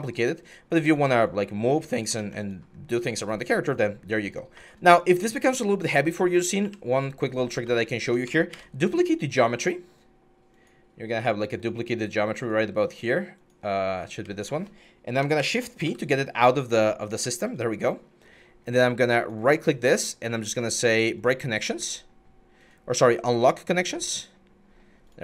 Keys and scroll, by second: 2.0 ctrl+z, 2.5 6, 7.3 alt+q, 8.3 ctrl+d, 15.2 p, 15.6 w.